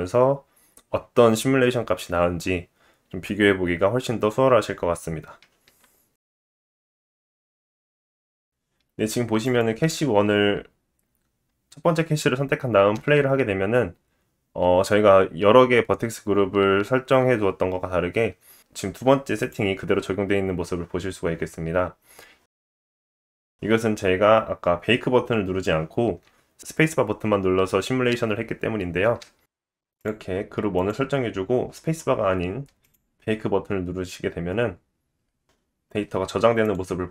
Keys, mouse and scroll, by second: 3.0-8.4 middle drag, 4.3 click, 5.1-6.3 scroll up 3, 8.1-9.5 drag, 8.1 right click, 8.1-8.4 scroll down 7, 9.5 middle click, 9.6-15.0 drag, 12.9 space, 15.0-16.0 scroll up 3, 18.1-20.5 drag, 18.4 space, 21.5-26.9 drag, 26.0 space, 27.2 space, 29.1 scroll down 9, 29.5 click, 32.8 click.